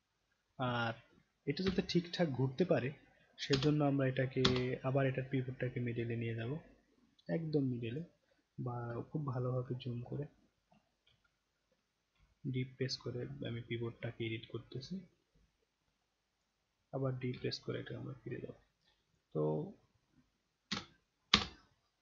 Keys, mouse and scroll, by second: 1.7 d, 3.5 space, 4.4 space, 5.0 scroll up 1, 5.1 scroll down 1, 5.4 scroll up 1, 6.4-7.9 drag, 8.2-8.8 scroll down 1, 9.1 alt+middle click, 9.7 scroll up 1, 10.2 alt+middle drag, 10.7 middle click, 11.3-11.6 alt+middle drag, 11.8 middle click, 12.2 alt+middle click, 12.3-12.7 alt+middle drag, 12.9 middle click, 13.3-13.8 alt+middle drag, 14.8-16.4 drag, 17.3 d, 17.9-18.3 scroll down 5, 18.5-18.9 scroll up 3, 19.1 click, 20.7 space, 21.3 space, 21.8 scroll up 1.